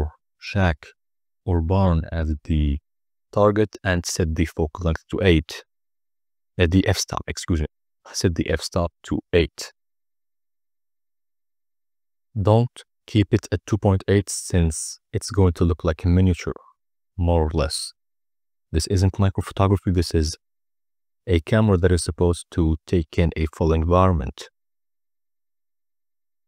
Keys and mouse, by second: 1.5 click, 3.0 click, 5.6-7.0 drag, 7.6 n, 7.9 click, 8.4 click, 8.6 click, 14.2 click, 14.6 click, 15.1 click, 15.6 click, 16.1 n, 17.4-18.8 drag, 19.1 click.